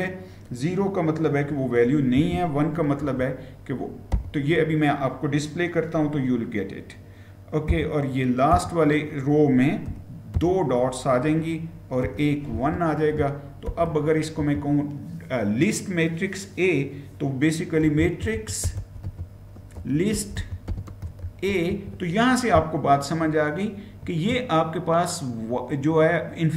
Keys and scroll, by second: 1.7-2.9 typing, 4.0 typing, 7.5-10.1 typing, 11.8-12.4 typing, 13.5 typing, 14.2 Return, 17.4-21.0 typing, 21.5 Return.